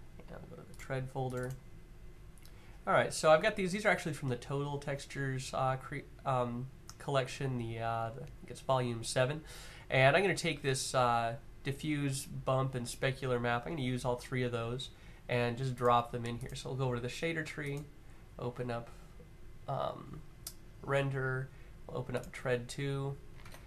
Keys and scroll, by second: 23.1 Tab.